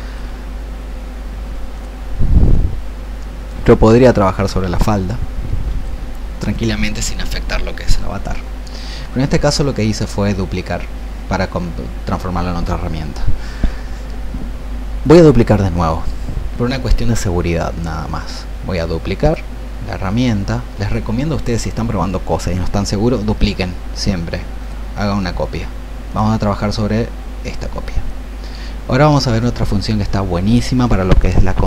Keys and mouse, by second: 1.8 alt+click, 4.0-31.6 ctrl+shift+drag.